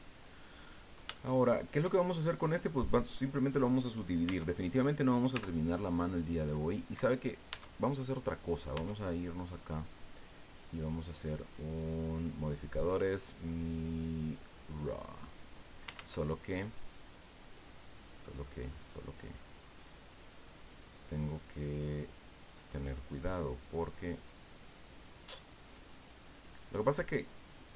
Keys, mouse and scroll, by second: 1.1 shift+click, 4.2 Tab, 5.3 w, 6.9 Escape, 7.5 Tab, 8.7 Tab, 9.1 click, 11.0 click, 11.7 click, 14.7 click, 16.0 ctrl+z, 17.7-18.0 scroll down 2, 18.2-23.2 drag.